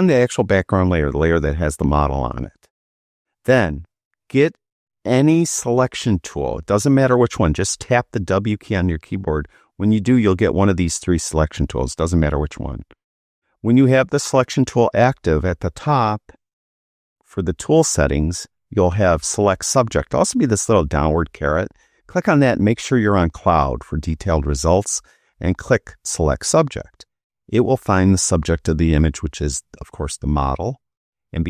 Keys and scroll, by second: 8.1 w.